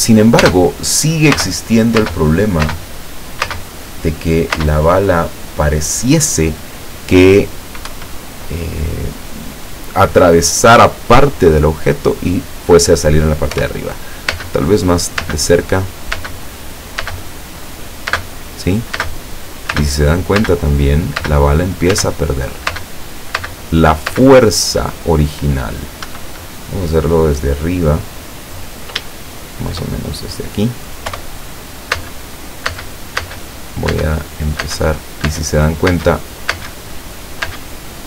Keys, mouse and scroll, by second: 0.5-3.5 typing, 4.6-6.0 middle drag, 4.6 space, 8.0 Escape, 8.8-9.2 scroll up 2, 13.6 p, 14.5 space, 15.3 space, 16.3 space, 17.1 space, 18.1-24.2 typing, 26.2 Escape, 26.5-28.8 drag, 29.2 shift+click, 31.2 p, 32.1 space, 32.7 space, 34.0 space, 34.7 space, 36.0 space, 37.5 space.